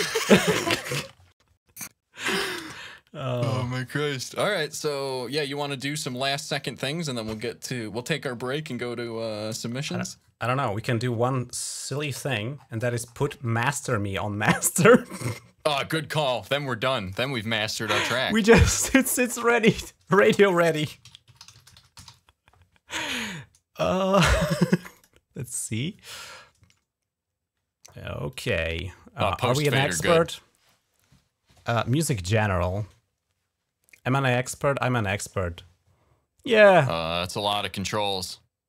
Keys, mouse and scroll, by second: 0.9 shift+scroll up 4, 1.6 shift+scroll up 2, 11.7 ctrl+click, 12.0 ctrl+s, 12.2-13.1 scroll up 3, 13.1 scroll down 1, 13.3 scroll up 1, 13.3 scroll down 1, 13.5 scroll up 2, 14.2 click, 16.5 right click, 16.9 click, 17.2 right click, 19.0 click, 20.4-22.4 typing, 24.0 click, 24.1 click, 24.8 click, 28.1 click, 31.7 click, 34.3 click.